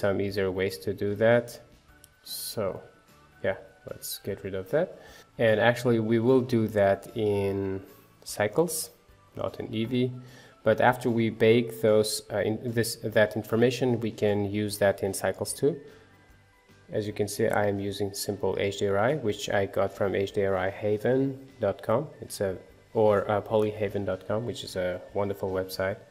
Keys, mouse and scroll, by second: 2.6-9.0 middle drag, 9.0-10.5 drag, 10.5-14.9 middle drag, 16.5-19.0 middle drag, 19.8-21.1 middle drag, 21.1 scroll up 2, 22.0 scroll down 2, 22.2-24.2 shift+middle drag, 24.2-26.1 drag.